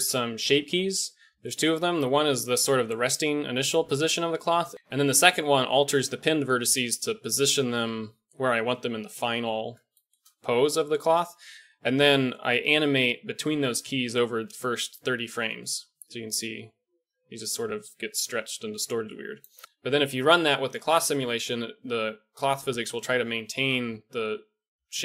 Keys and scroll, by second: 19.6 shift+Left.